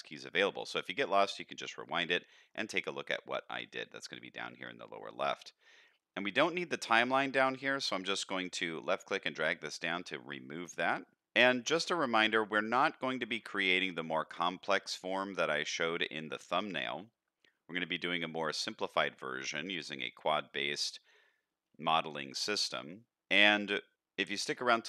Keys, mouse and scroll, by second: 6.5-7.5 drag, 8.4-9.9 drag, 11.5-12.3 middle drag, 12.6-13.2 middle drag, 13.5-13.8 shift+middle drag, 14.0 scroll up 1, 14.3-14.8 middle drag, 15.2-15.9 middle drag, 16.2-16.7 middle drag, 17.8-18.3 middle drag, 18.9-19.8 middle drag, 20.1-20.5 middle drag, 22.3-23.0 middle drag, 23.1 middle click, 24.3-24.8 middle drag.